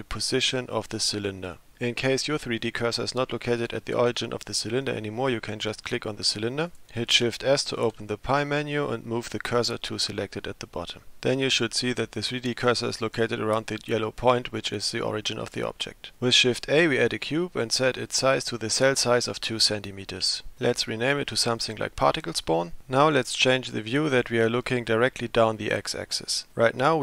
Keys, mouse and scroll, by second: 6.7 click, 7.8 shift+s, 16.3 shift+a, 18.5-20.6 drag, 20.9 F2.